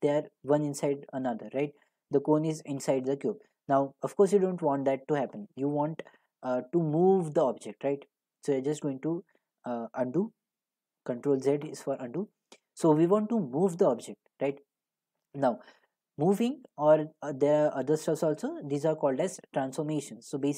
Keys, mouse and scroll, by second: 5.3 middle click, 6.9 click, 8.8 ctrl+z, 9.9 ctrl+z, 12.3 click.